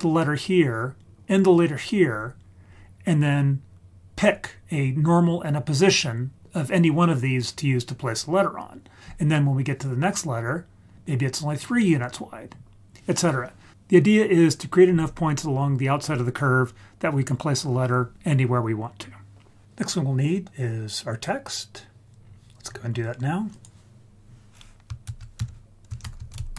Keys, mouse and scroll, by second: 1.0 click, 11.0 click, 22.2-22.9 scroll down 3, 22.6-23.5 scroll up 7, 23.5 click, 25.0 shift+a.